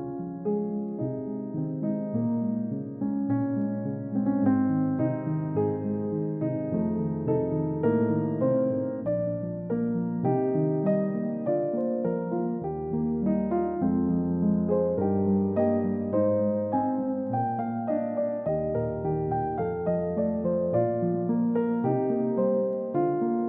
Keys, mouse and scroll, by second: 2.2 scroll down 1, 3.2 scroll up 1, 7.8-8.2 scroll up 1, 10.6-11.1 scroll up 1, 16.0-16.5 scroll down 1, 17.3 double click, 18.8-19.3 scroll up 1.